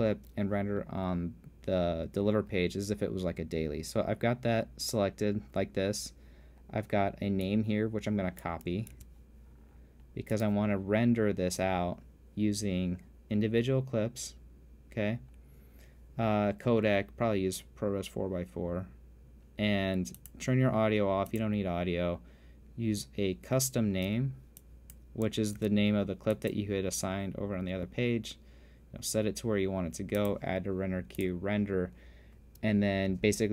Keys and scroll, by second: 0.3 t, 9.6 super+c, 26.2 super+v.